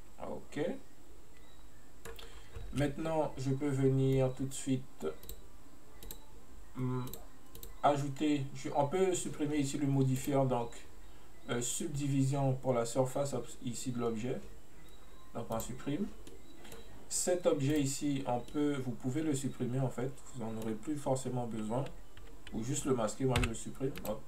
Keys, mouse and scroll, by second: 2.4-2.7 scroll down 1, 2.7 space, 5.3-6.2 drag, 7.1 click, 7.6 click, 10.3 click, 15.6 click, 16.3-17.8 middle drag, 17.8 right click, 18.5-21.9 middle drag.